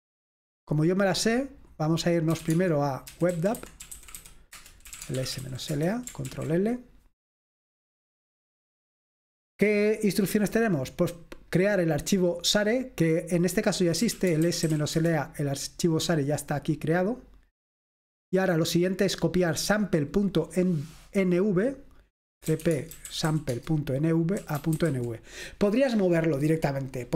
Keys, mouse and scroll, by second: 0.0 click, 2.2-6.1 typing, 6.3 ctrl+l, 10.7 click, 11.5 click, 13.8-16.1 typing, 17.4 click, 18.9 click, 19.8 click, 22.3-25.4 typing.